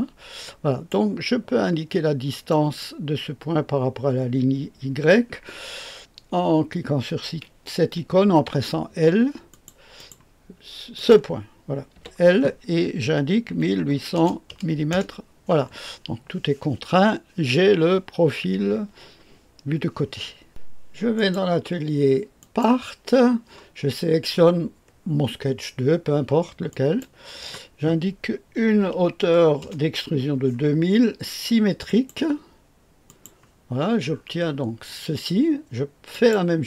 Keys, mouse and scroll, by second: 2.4 click, 8.4 i, 9.5 click, 9.9 click, 10.6 click, 11.9 l, 13.5-14.4 typing, 14.9 Return, 20.5 click, 21.2 click, 22.4 click, 28.6 KP_2, 28.9 KP_0, 29.2 KP_0, 29.6 KP_0, 31.8 click, 33.1 click, 33.7-36.1 scroll down 1, 36.1 click.